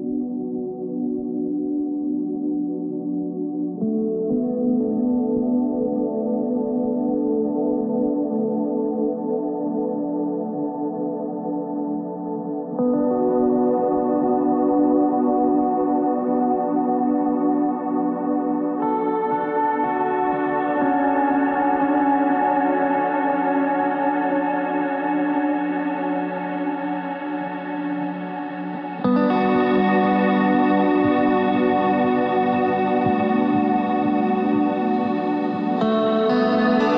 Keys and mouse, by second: 0.2 ctrl+Tab, 1.2 z, 1.8 c, 3.1 z, 3.4 Tab, 6.2-7.4 ctrl+z, 8.3 ctrl+z, 9.5 KP_3, 9.7 KP_1, 10.3 ctrl+Tab, 10.9 z, 11.2 c, 12.2 z, 14.1 ctrl+r, 17.1 ctrl+r, 18.7 z, 19.4 c, 19.7 click, 20.1 z, 22.1 z, 22.3 c, 23.2 z, 24.9 z, 25.2 c, 26.4 z, 27.3 ctrl+Tab, 35.0 e.